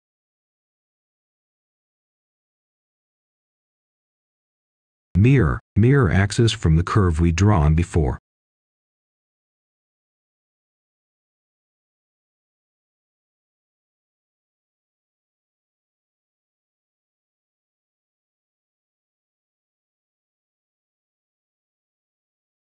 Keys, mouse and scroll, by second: 0.4 scroll down 1, 0.6 Escape, 1.0-1.4 scroll down 1, 1.4-2.8 scroll up 1, 2.8 click, 3.3 scroll up 1, 4.2 shift+click, 6.5 Return, 7.5-7.9 scroll down 1, 7.9-9.3 scroll up 1, 9.3 click, 11.8-12.3 scroll down 1, 12.3 right click, 13.3 Escape, 13.7-14.4 scroll up 1, 14.4 click, 15.0 scroll up 1, 15.4 shift+click, 16.7 shift+scroll up 2, 17.9-19.4 scroll down 1, 19.4 m, 19.9 Return, 22.5 click.